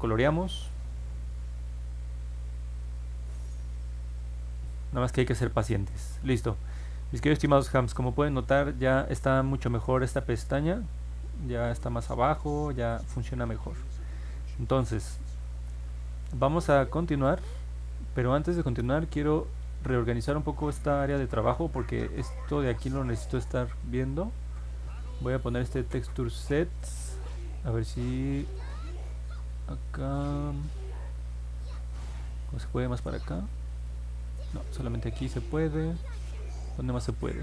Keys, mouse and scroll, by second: 6.8 middle click, 7.2 middle click, 7.5 middle click, 7.9 middle click, 8.3 middle click, 8.5 middle click, 11.8 alt+middle click, 12.9-14.4 alt+middle drag, 14.7 alt+middle click, 15.5-15.9 scroll down 1, 15.9 middle click, 25.9-37.4 drag.